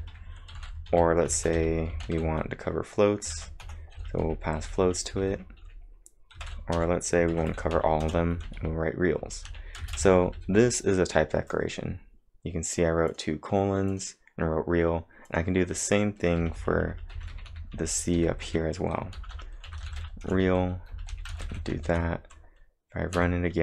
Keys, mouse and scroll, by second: 1.4 shift+f, 3.1-7.3 typing, 9.8 space, 9.9 f, 12.7 click, 13.1 click, 13.9 click, 15.3 click, 16.4-21.9 typing, 23.2 Up.